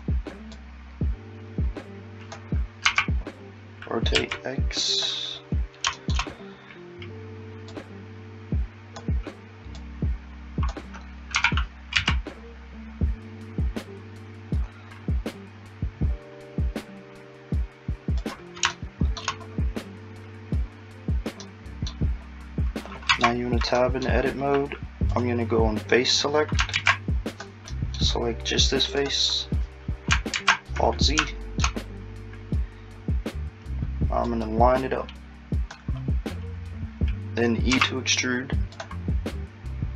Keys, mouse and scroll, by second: 2.8 r, 7.7 click, 11.4 r, 21.4 middle click, 23.1 Tab, 23.8 middle click, 25.1 click, 26.7 alt+z, 27.3 click, 27.7 middle click, 29.0 click, 30.4 alt+z, 30.7-31.3 scroll down 2, 31.3 shift+middle click, 31.8-34.3 scroll down 2, 34.3 click, 37.7 e.